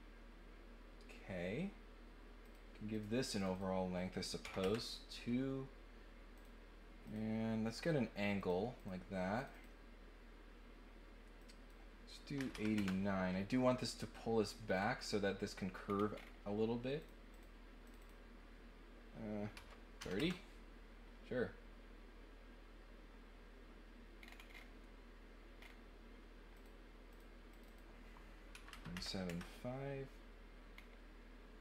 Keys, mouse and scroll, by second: 2.4 click, 2.9 click, 3.3 click, 3.5 click, 6.3 click, 7.0 click, 8.4 click, 8.7 click, 9.3 click, 9.5 click, 11.4 click, 14.6 scroll down 2, 15.8 scroll down 2, 16.1 scroll up 2, 16.9 click, 17.3 click, 17.8 click, 18.0 click, 24.2 scroll down 2, 25.6 middle click, 26.5 click, 27.0 click, 27.5 click, 30.7 middle click.